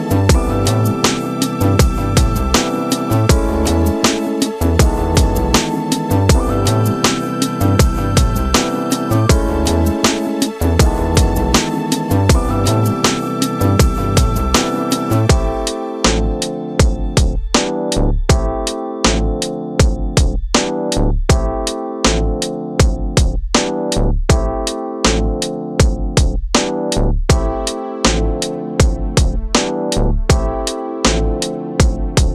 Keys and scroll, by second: 4.4 space, 5.9 Return, 7.2 alt+space, 7.6 c, 8.0 Return, 10.0 shift+F2, 10.3 ctrl+space, 11.0 w, 12.6 2, 12.9 Return, 13.2 shift+F2, 13.6 ctrl+d, 13.8 ctrl+KP_Add, 14.0 space, 16.8 ctrl+alt+d, 17.1 Return, 17.8 shift+F2, 18.3 ctrl+space, 20.6-21.5 typing, 22.0 ctrl+KP_Add, 22.4 ctrl+g, 24.7 ctrl+space, 28.3 Return.